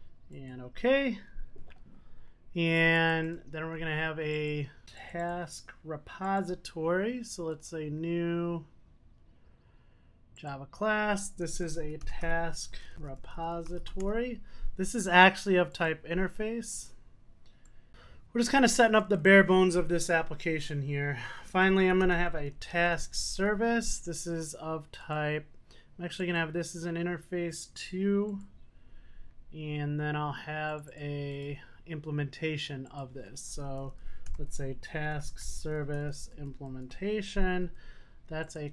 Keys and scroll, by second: 18.6 super+s.